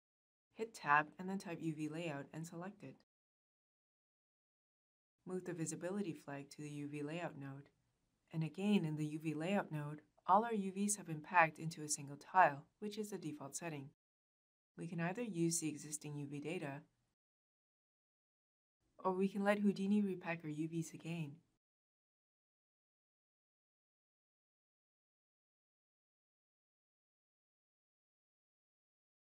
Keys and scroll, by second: 0.0 Tab, 1.1 Return.